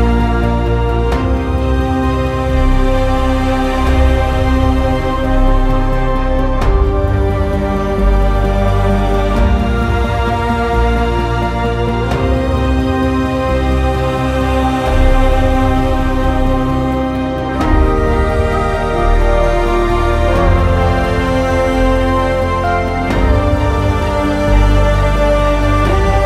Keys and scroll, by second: 2.4 t, 10.9 z, 17.8 z, 25.3-26.2 typing.